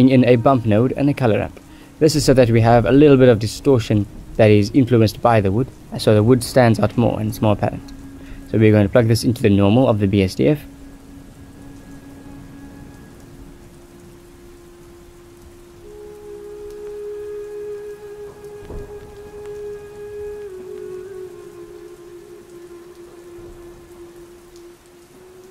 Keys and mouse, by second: 0.0 middle click, 0.7 click, 1.4 g, 3.0-3.7 drag, 4.1 click, 4.2 g, 5.0 click, 6.6 ctrl+g, 6.8 ctrl+s, 7.3 click, 7.8 shift+a, 11.5 click, 11.6 shift+d, 12.6 click, 14.3 click, 16.0 click, 19.2-20.3 drag, 20.7 middle click, 21.6 click, 22.6 middle click, 23.6 click, 24.2 middle click, 24.9 click.